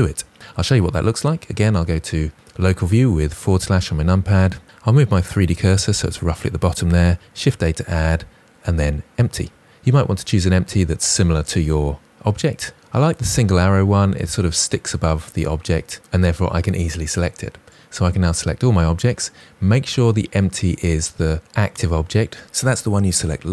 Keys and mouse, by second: 3.5 middle click, 5.9 shift+click, 7.3 shift+a.